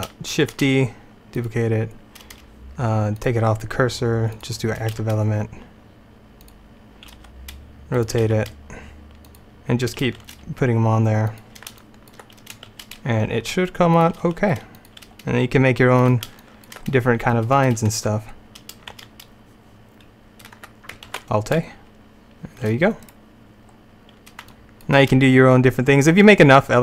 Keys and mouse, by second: 0.4 shift+d, 5.0 s, 7.3 r, 8.3 g, 10.3 shift+d, 12.8 shift+d, 14.3 r, 15.1 g, 18.3 middle click, 19.0 shift+a, 21.2 alt+a, 23.1 right click, 23.8 click, 23.9 click, 24.5 click, 25.2 middle click.